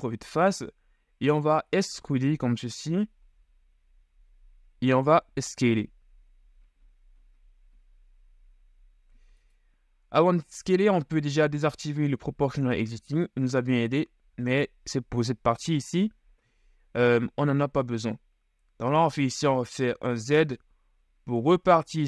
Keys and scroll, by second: 3.3 e, 5.5 s, 19.1 z.